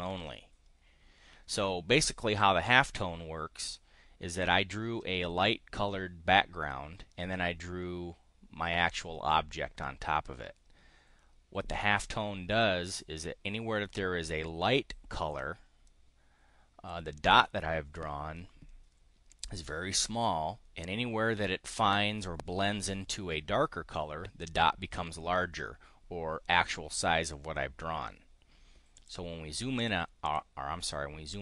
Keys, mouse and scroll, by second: 28.9 click, 29.8 click, 30.2 click.